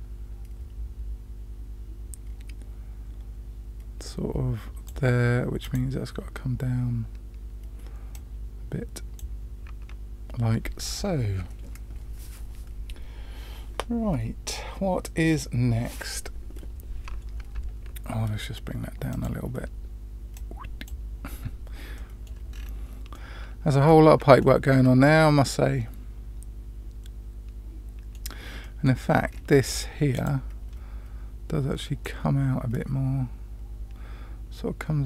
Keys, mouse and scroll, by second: 5.6 click, 8.1-9.2 drag, 19.1 click, 20.3 click, 21.9 middle click, 22.5-23.1 scroll down 2, 23.1-23.9 middle drag, 24.4 shift+middle drag, 25.0-28.1 middle drag, 28.6-28.9 middle drag, 29.2-29.7 scroll up 3, 30.1 click, 32.0 click.